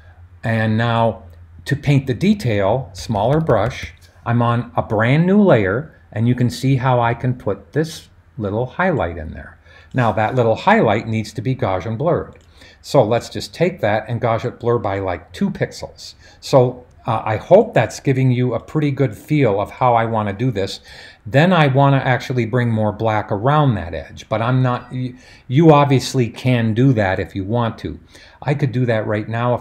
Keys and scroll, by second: 3.0-3.8 typing.